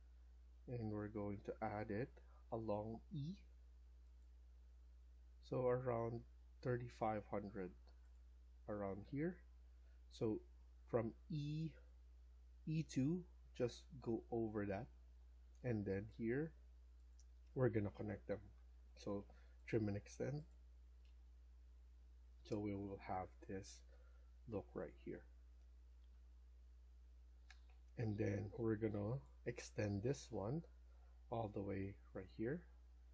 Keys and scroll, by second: 8.7 Escape, 17.1 Escape, 17.5 Escape, 18.2-19.1 typing, 26.6 Escape, 26.9 Escape, 32.6 Escape, 32.8 Escape.